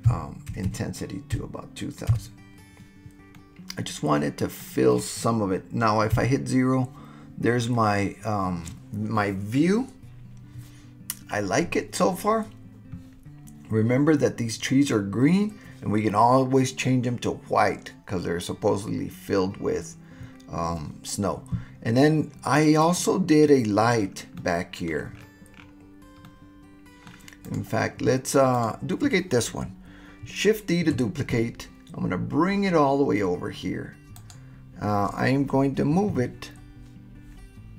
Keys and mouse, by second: 0.7 KP_0, 3.3-6.4 middle drag, 6.1 KP_0, 22.9 click, 24.4-24.9 middle drag, 26.3-27.1 drag, 26.3-27.1 right drag, 27.4 click, 28.5 click, 30.9 shift+d, 34.2 click, 36.1 w.